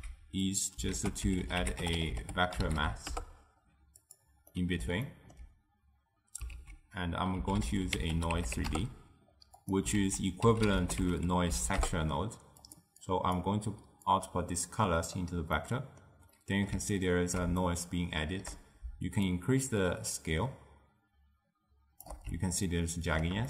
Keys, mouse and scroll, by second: 1.0 ctrl+a, 4.6-6.6 middle drag, 6.6 ctrl+a, 10.1 ctrl+a, 13.1 click, 14.2-15.7 drag, 15.7-19.4 middle drag, 19.4-22.4 shift+drag, 22.8-23.4 ctrl+middle drag.